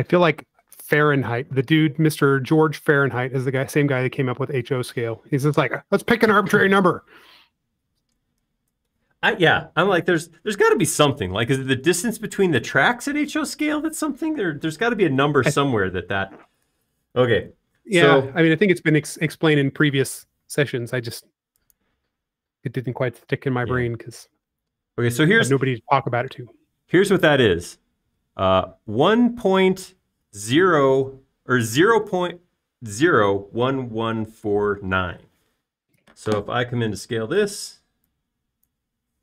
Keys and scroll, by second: 38.6 s.